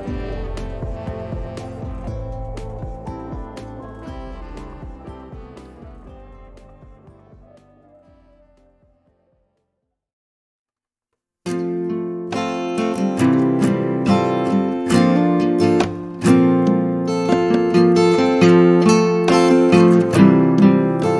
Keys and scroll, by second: 0.1 Escape, 1.6 e, 3.7 space, 6.5 2, 7.0 Return, 9.6 t, 11.8 t, 19.2 4, 19.6 Return, 21.0 space.